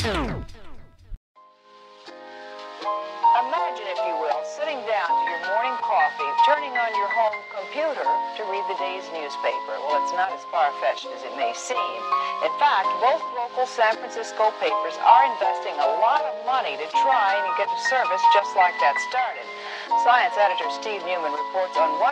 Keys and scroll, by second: 3.4 shift+Left, 11.3 space, 13.4 m, 14.5 space, 19.5 m, 20.5 space, 21.1 m.